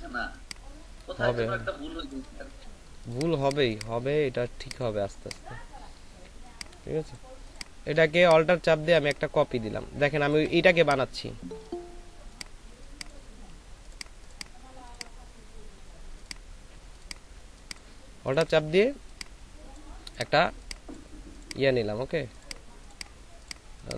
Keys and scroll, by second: 0.0 shift+space, 3.6 space, 10.6 alt+shift+space, 12.6 space, 17.4 space.